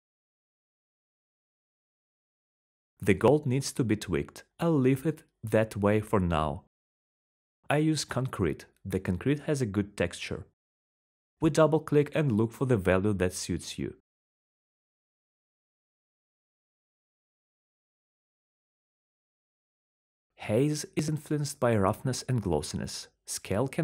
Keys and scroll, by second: 1.9-4.7 typing, 6.1-9.1 typing, 11.2-12.3 typing, 15.9-18.5 typing.